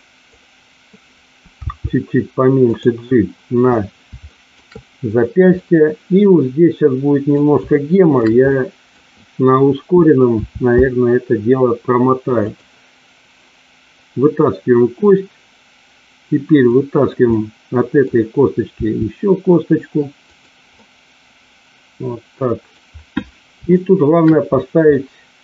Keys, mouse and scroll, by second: 1.7 g, 2.7 click, 4.2 shift+middle click, 5.5-7.3 middle drag, 7.7 shift+middle click, 8.5 middle click, 10.3 e, 16.7 middle click, 17.2 middle click, 18.7 e, 20.3 click, 20.8-22.8 middle drag, 23.8 shift+middle click, 24.9-25.4 middle drag.